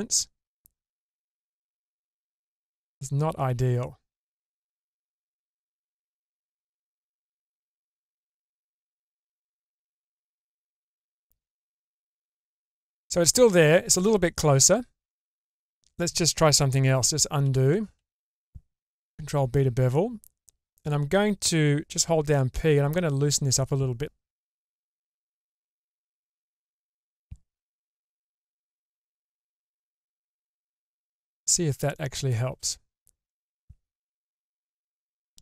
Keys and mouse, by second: 5.9 Tab, 7.4-8.0 middle drag, 9.1-11.1 middle drag, 14.3 Tab, 15.1 middle click, 16.0 shift+middle click, 17.1 middle click, 19.0 ctrl+b, 25.4-27.1 middle drag, 28.1 k, 31.1 click, 31.9 middle click, 32.5 Tab, 33.3-34.7 middle drag, 35.3 click.